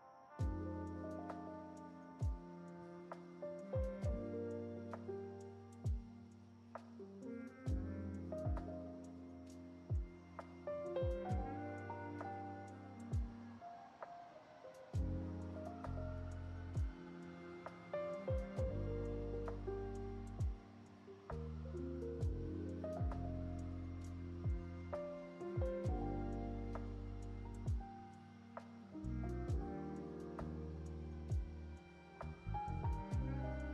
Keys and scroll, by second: 4.1 alt+Home, 13.4 Return, 17.4 ctrl+shift+c, 21.4 6, 27.3 g, 32.7 space, 33.2-33.7 space.